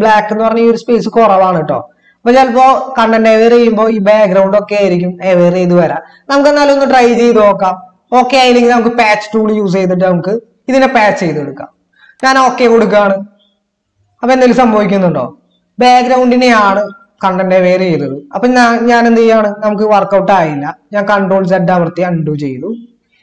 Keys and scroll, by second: 21.7 ctrl+z.